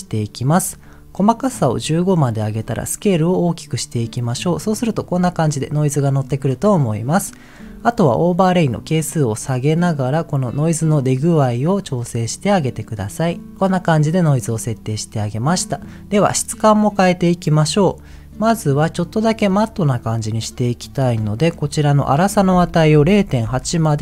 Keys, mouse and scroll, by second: 0.0-0.6 scroll up 1, 0.8 click, 3.0-5.0 drag, 6.8 middle click, 8.7-13.3 drag, 13.6 middle click, 18.7 middle click, 20.6-21.0 scroll down 2, 21.0 middle click, 22.1-23.6 drag.